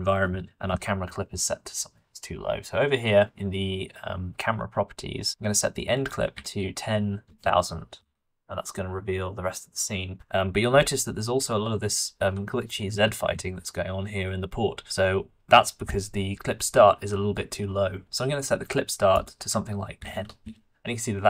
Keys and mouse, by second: 6.0-7.2 middle drag, 7.2 KP_0, 11.0 g, 19.1-20.4 drag.